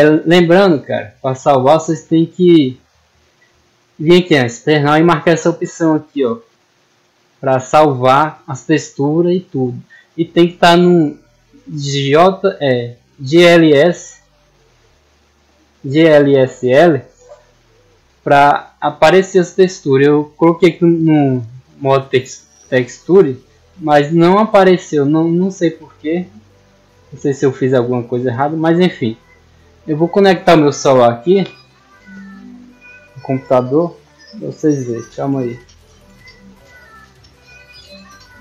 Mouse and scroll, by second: 1.1 click, 22.4 click, 23.1 click, 24.9 click, 25.7 click, 26.7 middle click, 27.6 middle click, 28.8 middle click.